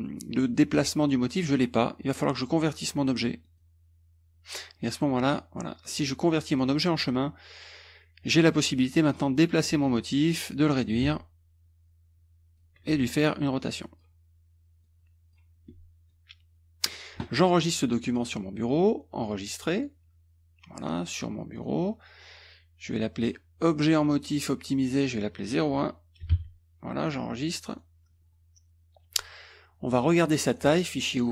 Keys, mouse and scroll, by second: 1.6 click, 3.4 click, 4.8 click, 8.5-10.0 drag, 11.0-12.8 ctrl+drag, 13.5 click, 14.8 click, 16.1 ctrl+click, 18.1 click, 19.7 click, 21.5 click, 23.3 click, 23.9 click, 24.9 click, 26.2 KP_0, 26.3 KP_1, 27.7 click, 30.5 click, 31.2 click.